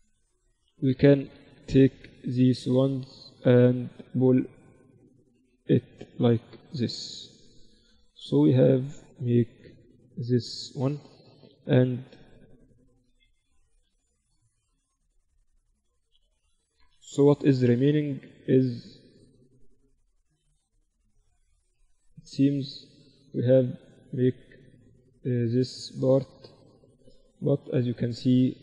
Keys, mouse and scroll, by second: 1.1 click, 2.0-3.9 right drag, 2.7-4.6 drag, 5.4 KP_1, 6.2 z, 6.7 Tab, 7.6 z, 8.3 middle click, 13.2 ctrl+alt+shift+c, 15.7 KP_Divide, 16.3 z, 17.0 KP_1, 19.0-20.4 drag, 22.4-24.5 middle drag, 23.2 z, 24.6 z, 25.6-28.6 middle drag.